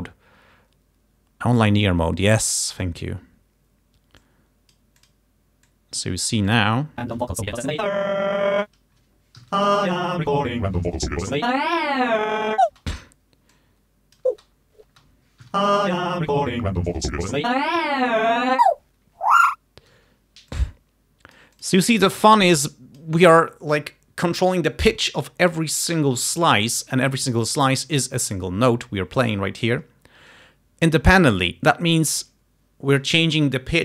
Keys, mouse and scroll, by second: 1.6 click, 2.2 scroll down 2, 2.9 scroll up 2, 4.3 click, 5.1 click, 5.8-6.9 drag, 7.1 space, 8.8 space, 9.5 Home, 9.6 space, 12.8 space, 13.0 click, 13.7 click, 14.4 space, 15.6 Home, 15.7 space, 20.0 space, 20.7-21.9 drag, 22.4 click, 28.2-28.9 ctrl+scroll up 4, 29.4-30.1 ctrl+scroll down 4.